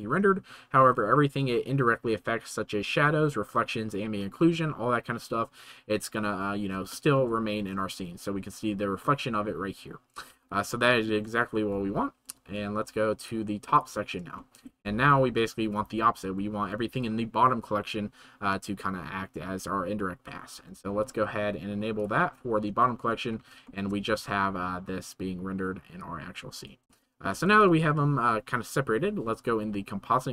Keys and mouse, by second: 7.1 shift+middle click, 10.7-11.2 shift+drag, 13.2 middle click, 14.4 shift+middle drag, 22.0 middle click, 22.8 shift+middle drag, 26.0-26.7 drag, 27.0 shift+middle drag.